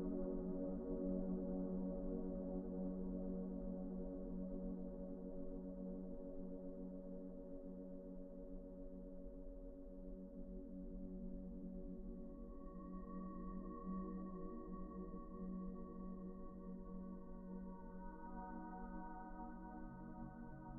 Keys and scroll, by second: 1.2 e, 1.9 1, 12.4 ctrl+z, 19.5 b.